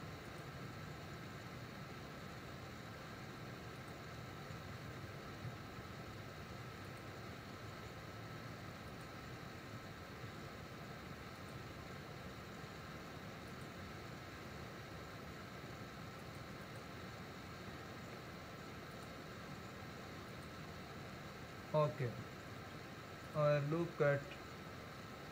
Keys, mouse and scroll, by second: 5.8 ctrl+r, 10.3 ctrl+r, 14.4 ctrl+r, 17.9 ctrl+r, 22.5 ctrl+r.